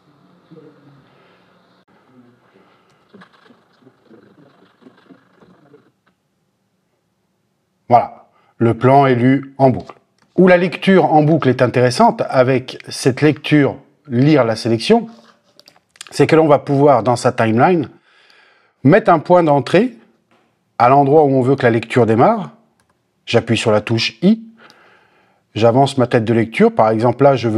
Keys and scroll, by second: 1.8 l, 2.9 l, 5.4 l, 10.2 space, 22.8 i.